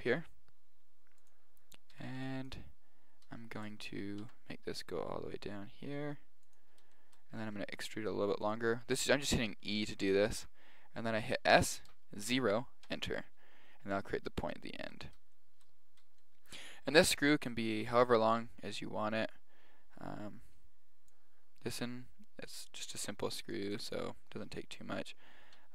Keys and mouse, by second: 2.0 a, 2.1 b, 3.0-5.4 middle drag, 4.2 e, 7.0-8.7 middle drag, 7.4 e, 10.4 s, 14.0-18.1 middle drag.